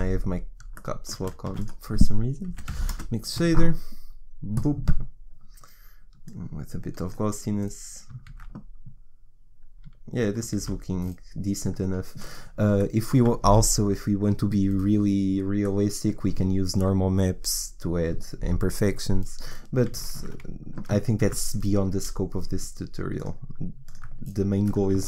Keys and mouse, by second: 1.5 shift+a, 7.6 click, 8.3 shift+z, 11.3 shift+z, 20.2 shift+z, 21.3 shift+z, 24.7 right click.